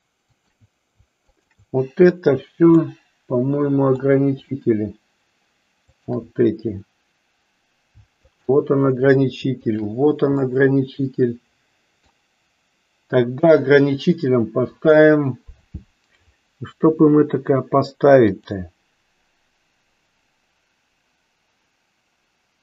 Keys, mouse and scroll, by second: 0.2 shift+click, 1.2 shift+click, 2.8-4.0 middle drag, 5.9 shift+click, 8.2 shift+click, 10.4-12.3 middle drag, 18.3-22.6 drag.